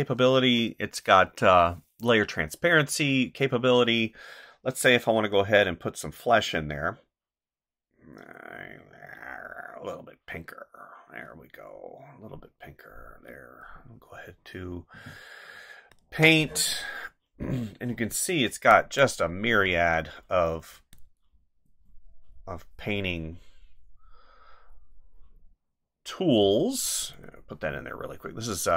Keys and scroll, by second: 19.6 ctrl+z.